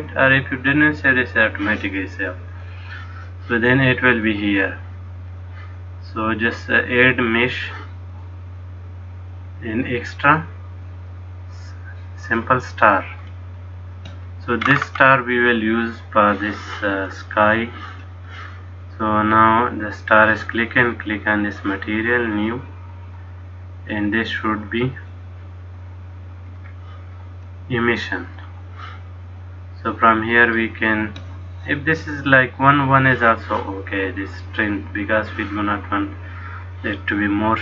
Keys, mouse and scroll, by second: 4.4 click, 13.4 middle click, 14.7-16.5 scroll up 6, 22.5 click, 26.6 click, 30.5 click, 36.4 click.